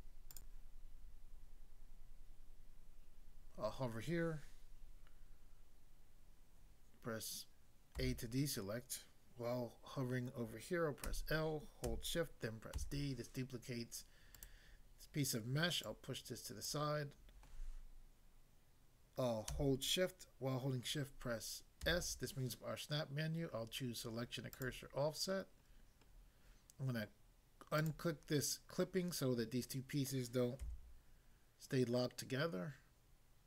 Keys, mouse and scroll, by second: 0.3 click, 0.5 click, 7.9 a, 11.0 l, 12.7 d, 14.3 right click, 15.9 click, 16.7 click, 21.8 s, 24.6 click, 25.7 scroll up 1, 27.8 click, 30.6 s.